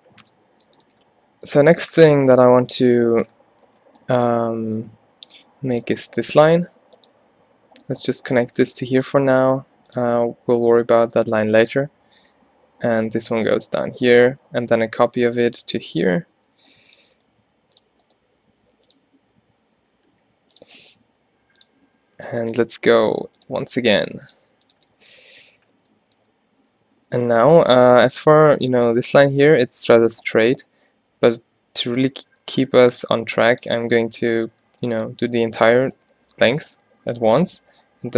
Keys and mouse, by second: 1.1 z, 3.3 middle click, 5.3 shift+d, 5.9 e, 7.6 g, 8.7 g, 9.3 e, 11.6 e, 14.6-21.9 typing, 17.3-18.3 drag, 23.0 g, 23.6 e, 24.5 e, 25.4 z, 26.8 z, 27.5 z, 28.3 z, 29.4 e, 33.9 z, 35.9 middle click, 37.0 alt+w, 37.9 g.